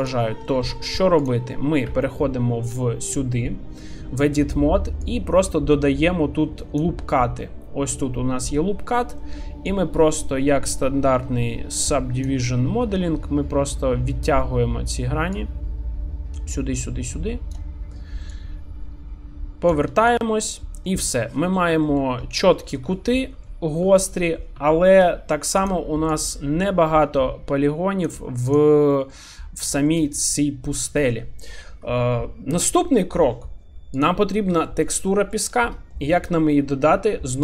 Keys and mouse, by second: 0.4 shift+middle drag, 0.7 middle click, 1.2 click, 1.8 Tab, 5.1-6.8 drag, 9.8-12.3 drag, 15.4-17.6 drag, 18.3-19.7 drag, 20.3 Tab, 20.8 middle click, 21.8 middle click, 22.5 shift+middle drag, 22.9-23.4 middle drag, 23.9 shift+middle click, 25.2 shift+d, 26.0-28.9 drag, 28.9 middle click, 29.7 shift+middle click, 30.0 middle click, 33.9 click, 34.6 shift+middle drag, 35.1 middle drag, 35.9 shift+middle click.